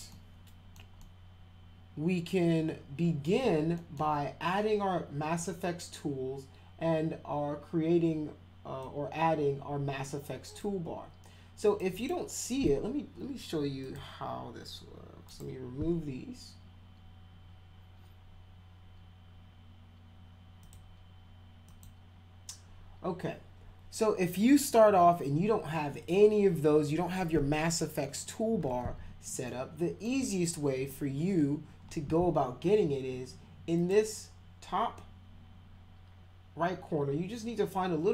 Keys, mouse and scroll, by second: 0.1 alt+middle click, 1.0-3.2 alt+middle drag, 3.8 middle drag, 8.8-10.6 drag, 11.7 click, 12.0 right click, 13.8 click, 15.3 right click, 20.6 click, 21.7 click, 29.4 alt+middle click, 33.8 click.